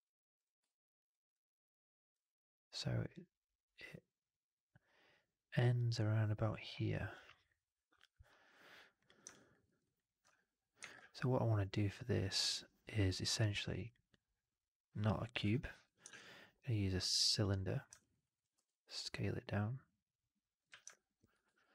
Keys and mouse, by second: 0.3 drag, 0.5-1.0 alt+drag, 1.2-2.0 alt+middle drag, 3.4-8.9 middle drag, 9.2 alt+drag, 9.5 alt+middle drag, 9.7 alt+right drag, 10.8 shift+Tab, 15.3 Delete, 16.0 shift+Tab, 17.9 alt+right click, 18.1 right drag, 18.4 r, 19.0-20.5 middle drag, 20.6 w, 20.8 alt+drag, 21.2 f, 21.5 alt+right drag.